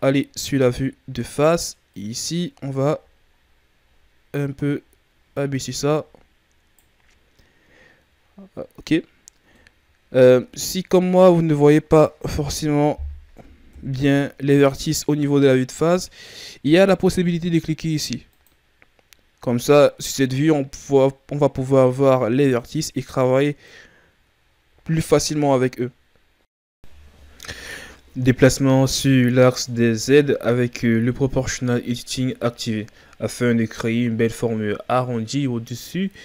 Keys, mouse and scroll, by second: 0.7-1.8 scroll up 2, 1.8-4.8 right drag, 9.5-12.3 middle drag, 12.3 KP_3, 13.6 KP_1, 15.2-16.0 scroll down 1, 16.0-17.1 scroll up 1, 17.1-18.2 scroll up 1, 18.2 click, 19.6-20.7 scroll down 2, 20.7-22.2 scroll up 4, 22.2-23.9 right drag, 27.3-29.5 right drag, 29.5 ctrl+z, 30.2 click, 32.1 right click, 32.6 click, 34.4 Tab, 35.0 Tab, 35.6-36.1 ctrl+scroll up 2, 36.1 right click.